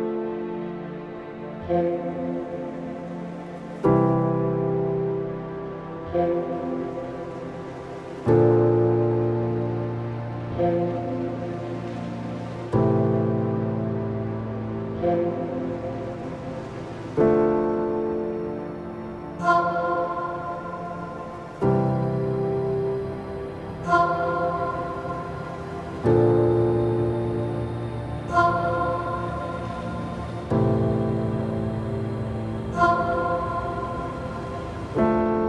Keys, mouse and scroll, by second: 0.5 click, 1.4-2.9 drag, 3.5-5.0 drag, 5.0 scroll up 1, 5.2 middle click, 5.6 scroll up 1, 5.9 middle click, 6.5 click, 7.1 click, 8.2-9.8 drag, 11.0 click, 13.4 click, 14.0 click, 15.0 click, 15.2-16.4 drag, 16.4-16.7 scroll down 2, 16.7-18.0 middle drag, 18.0 click, 19.6-21.7 drag, 23.0 scroll down 1, 23.3 middle click, 23.9-24.2 scroll up 1, 24.2 click, 24.9 Tab, 25.4 shift+middle click, 25.8 `, 27.0-28.5 scroll up 1, 28.5 shift+z, 28.9 e, 29.7 click, 31.0 shift+z, 31.5 middle click, 31.9 2, 32.1 e, 33.3 ctrl+z, 34.1 3, 34.4 click, 34.7 alt+click.